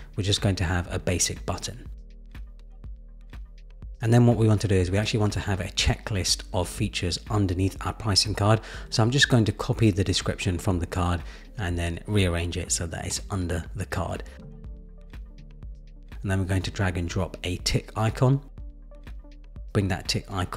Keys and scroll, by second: 0.7 super+v, 0.9 Return, 8.7 super+c, 8.9 super+v.